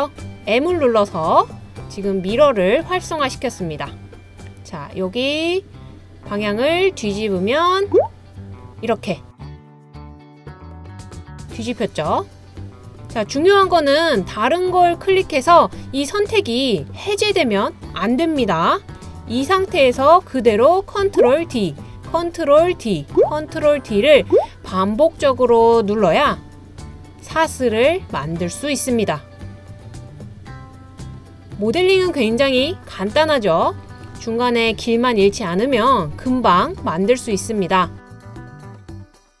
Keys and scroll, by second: 20.9 super+d, 22.0 super+d, 23.0 super+d, 24.0 super+d, 25.0 super+d, 26.1 super+d.